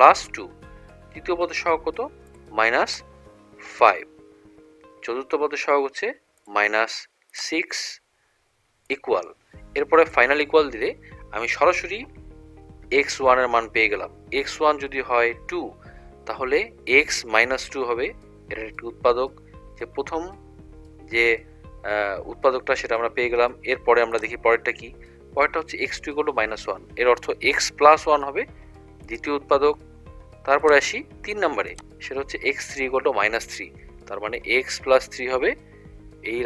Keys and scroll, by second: 0.2 =, 2.4 -, 2.9 5, 3.9 =, 6.5 -, 7.4 6, 9.0 =, 10.2 =, 24.2 Down, 30.7 Down.